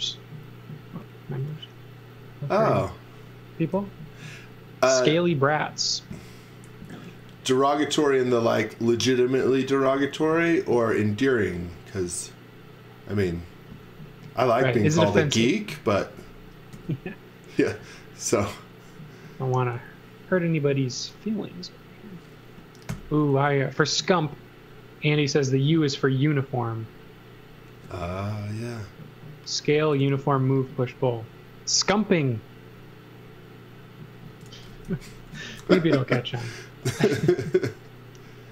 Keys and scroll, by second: 3.7 l, 16.7 c, 22.9 l, 27.7 space, 30.0 a, 34.2-36.1 typing.